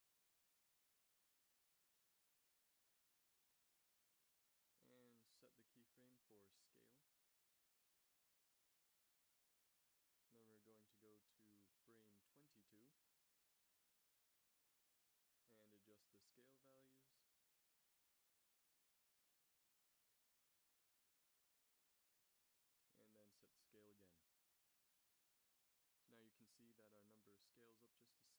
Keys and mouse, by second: 7.1 i, 12.0-12.7 Right, 13.1 Right, 13.4 Right, 17.2-20.4 drag, 20.4 ctrl+c, 21.0 ctrl+v, 21.5 ctrl+v, 22.8 i, 24.0-24.6 drag.